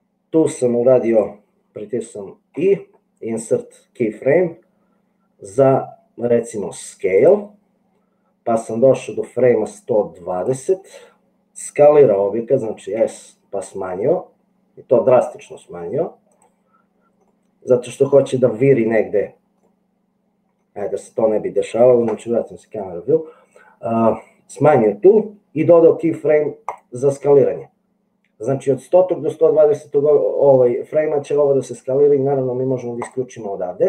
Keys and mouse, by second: 2.7 i, 8.8-10.7 drag, 13.2 s, 17.5 middle click, 18.1 middle click, 19.9-21.2 middle drag, 22.0 KP_0, 25.7 i, 33.1 click.